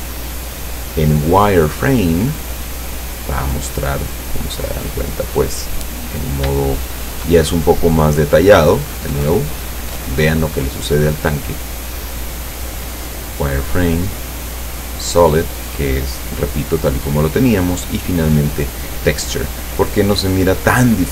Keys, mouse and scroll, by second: 2.0 click, 4.1-5.1 middle drag, 5.3 middle click, 5.8 middle click, 5.9 scroll up 1, 6.7 shift+middle click, 8.9 click, 9.4 click, 12.2 click, 13.1 click, 14.2 click, 14.7 click, 15.3 click, 17.6 click, 18.7 click, 20.2 scroll down 1.